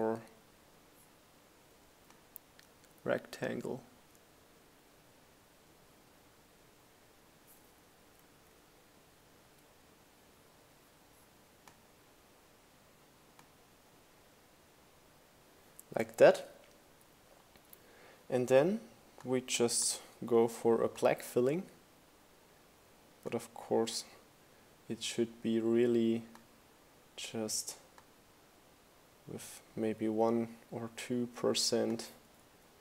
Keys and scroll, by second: 4.3 Down, 4.5 Left, 4.8 Down, 4.9 Left, 5.4 Up, 28.4 Up.